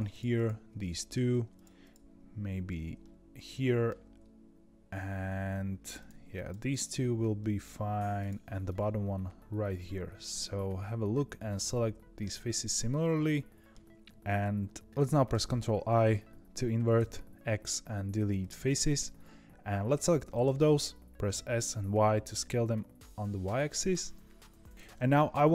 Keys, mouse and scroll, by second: 0.0 shift+click, 0.3 shift+click, 0.7 middle click, 1.5 shift+click, 1.7 shift+click, 2.9-5.9 middle drag, 5.9 shift+click, 6.3 shift+click, 6.6 shift+click, 7.3 middle click, 8.1 shift+click, 8.6-11.6 middle drag, 15.4 ctrl+i, 16.9 x, 20.2-21.2 middle drag, 21.2 s, 24.9-25.5 middle drag.